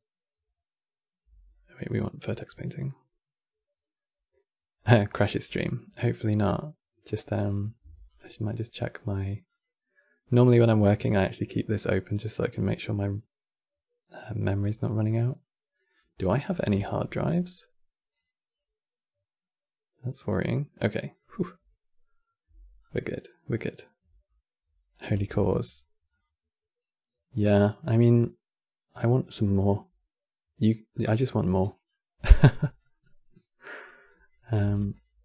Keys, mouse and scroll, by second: 0.0 Tab, 0.1-1.0 right drag, 1.0 Tab, 15.6 click, 31.6-32.3 middle drag, 32.3-32.6 scroll down 2, 32.6-33.8 middle drag, 33.8 click, 34.3 g, 35.1-35.2 middle drag.